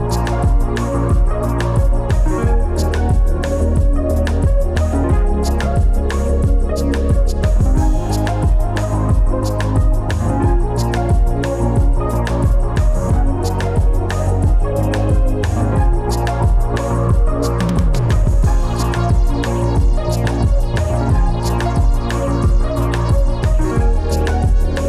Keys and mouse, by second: 5.1 alt+z, 6.2 Tab, 7.4 g, 7.7 x, 10.0 g, 11.4 click, 12.0 Escape, 12.7 click, 13.7 Tab, 15.5 t, 16.7 Tab, 17.6 click, 18.3 click, 19.1 g, 19.3 x, 20.8 Tab.